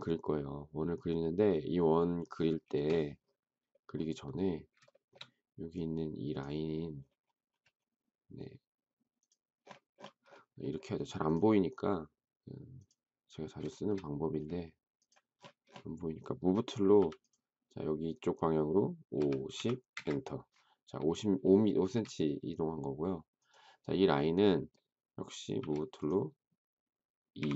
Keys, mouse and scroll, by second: 2.6 space, 4.9 shift+middle click, 13.7 shift+middle click, 16.9 m, 18.8-20.0 typing, 21.7 space, 25.5 m, 27.1-27.5 typing.